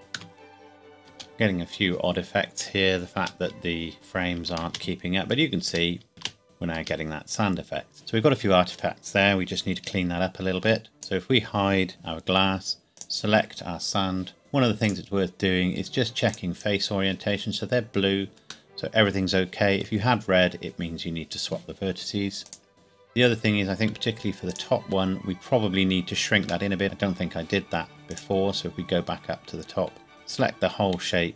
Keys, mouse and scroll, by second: 0.7 KP_0, 0.9 scroll up 1, 1.1 space, 3.1 space, 5.0 space, 10.5 Escape, 10.9 click, 11.9 h, 12.9 click, 15.7 click, 18.7 middle click, 22.4 click, 23.1 scroll up 1, 23.9-24.4 scroll up 1, 24.5 click, 25.7-26.3 scroll up 1, 26.7 shift+middle click, 28.1 click, 29.1 scroll down 1, 30.1 Tab, 30.3 a.